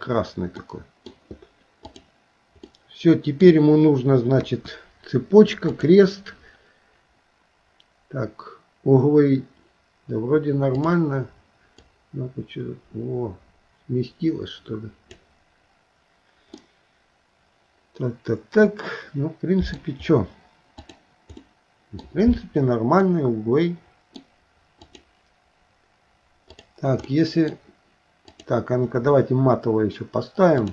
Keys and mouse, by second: 0.6 middle click, 2.7 middle click, 4.4 KP_1, 5.7 click, 11.8 click, 12.1-15.2 drag, 16.8-19.8 middle drag, 21.4 middle click, 23.1-24.2 middle drag, 24.9 click, 27.1 middle click, 28.3 click.